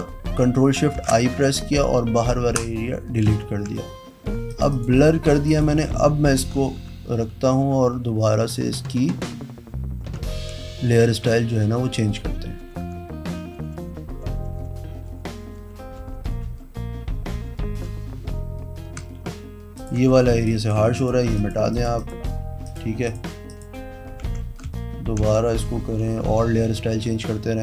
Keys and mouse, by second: 0.9 ctrl+shift+i, 2.4 Pause, 3.2 ctrl+f, 4.4 click, 4.7 click, 5.1 v, 5.4 click, 7.9-10.6 typing, 11.6 shift+-, 12.6-15.0 typing, 17.8 shift+-, 19.7 click, 19.9 e, 20.4 click, 20.9 click, 21.3 click, 21.7 click, 21.9 click, 22.6 click, 23.0 click, 23.4 click, 24.2 v, 26.0-27.6 typing.